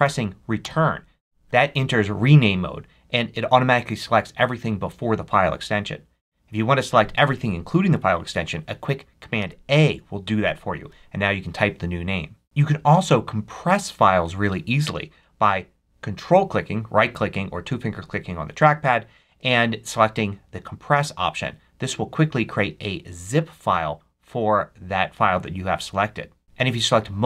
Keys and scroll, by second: 0.5 Return, 9.3 super+a.